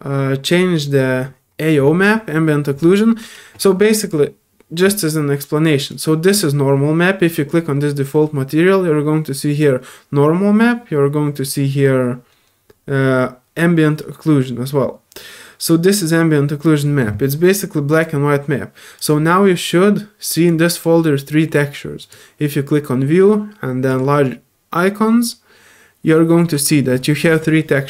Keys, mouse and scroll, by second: 4.0 click, 5.9 click, 12.5 middle click, 17.9 click, 18.9 click, 20.5-20.8 drag, 22.0 click, 23.9 click.